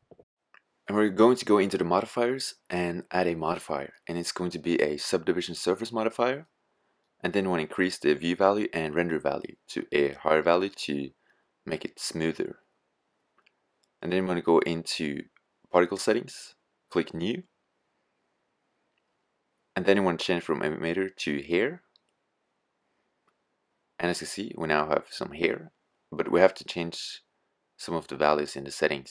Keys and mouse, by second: 9.5 middle click, 17.1 click, 21.6-29.1 drag.